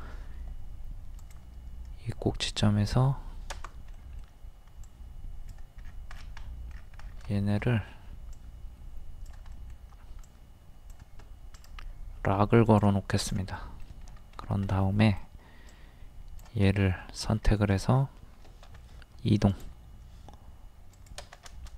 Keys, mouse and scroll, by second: 1.2 ctrl+click, 4.0 middle click, 4.8 click, 5.9 scroll down 1, 6.4 middle click, 6.7 scroll down 1, 7.3 shift+middle click, 8.3-9.5 drag, 10.3-11.5 drag, 11.7 right click, 12.6 click, 13.5 middle click, 14.1 scroll up 1, 14.7 middle click, 15.8 click, 16.7 middle click, 17.5 scroll up 1, 18.7 scroll up 1, 20.9 click, 21.5-21.7 shift+middle drag.